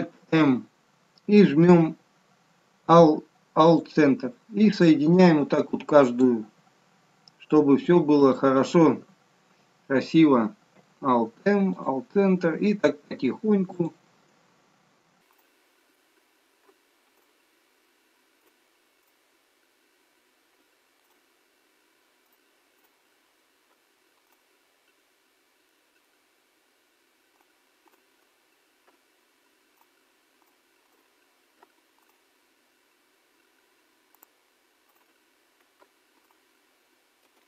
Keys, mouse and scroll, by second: 0.7 alt+m, 6.1 click, 8.2 shift+click, 10.7 alt+m, 13.7 click, 15.3 shift+click, 16.6 alt+m, 18.3 click, 19.0 shift+click, 20.5 alt+m, 22.2 click, 22.7 shift+click, 23.7 alt+m, 24.7-25.5 scroll down 4, 25.6 alt+middle click, 26.4 scroll up 3, 27.3 click, 27.8 shift+click, 28.8 alt+m, 30.3 click, 30.8 shift+click, 31.5 alt+m, 32.9 scroll up 5, 34.1 click, 34.8 shift+click, 35.8 alt+m, 37.3 ctrl+z.